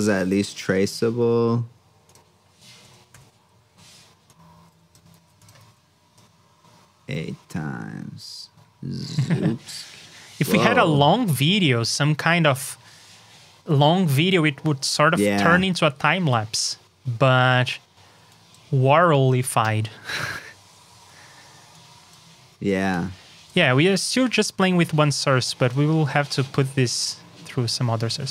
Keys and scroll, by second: 5.1 super+c, 5.5 super+v, 24.4 alt+shift+Down, 26.7 super+Tab.